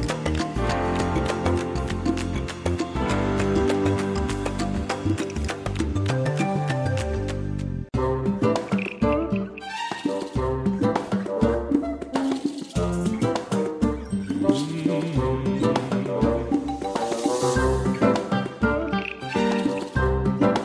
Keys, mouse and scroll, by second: 3.6 scroll up 1, 5.8 click, 12.8 click, 13.3 space, 14.4-14.8 ctrl+scroll down 1, 15.1 space, 17.3 click, 19.7 click.